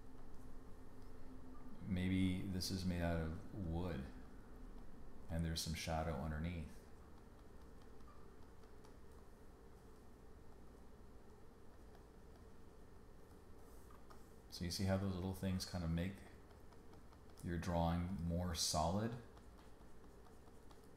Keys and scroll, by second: 13.9 space.